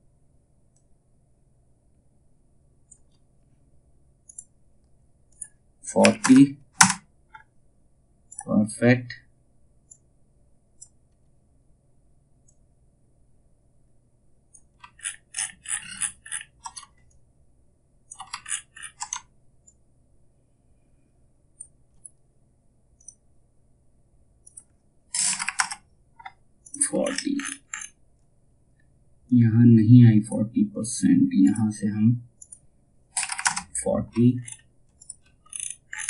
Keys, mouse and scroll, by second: 7.8-14.4 drag, 15.8-16.2 alt+scroll down 1, 16.6 shift+click, 17.9-18.3 alt+scroll down 1, 19.2 shift+click, 26.1 click, 26.5-26.8 alt+scroll up 1, 28.8-30.9 drag, 33.9-34.5 alt+scroll up 1, 34.5 alt+click, 34.9 alt+scroll up 1.